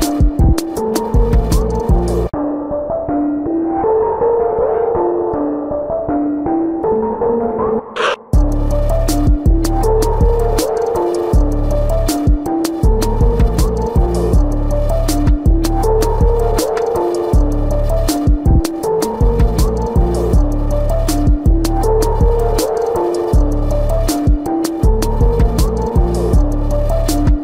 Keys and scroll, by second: 1.7 space, 4.4 space, 6.0 space, 6.7 ctrl+alt+z, 8.3 space, 8.8 space, 9.8 ctrl+-, 10.4-13.2 typing, 11.0 ctrl+-, 12.8 ctrl+-, 13.2 ctrl+-, 16.2 space, 16.8 space, 17.1 ctrl+alt+z, 17.4 space, 18.2 space, 19.8 ctrl+alt+z, 20.4 space, 22.5 space, 24.3 space, 26.4 space.